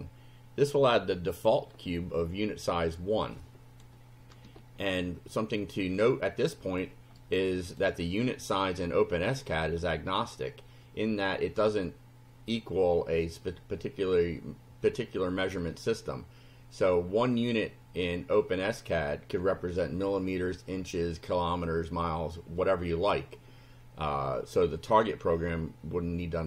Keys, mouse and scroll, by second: 1.0 click, 1.6-3.5 middle drag, 3.5-4.1 scroll up 3, 5.0-6.2 shift+right drag, 6.4-7.0 scroll up 2, 7.2 right click, 8.0 scroll up 1.